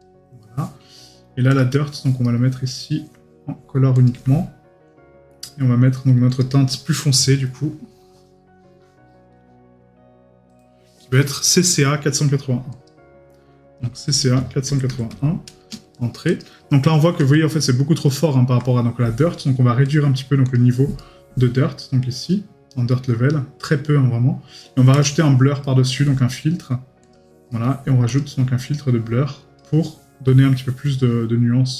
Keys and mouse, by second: 2.2 right click, 17.3 right click, 18.1 middle click, 21.0 right click, 25.6 right click, 27.5 right click.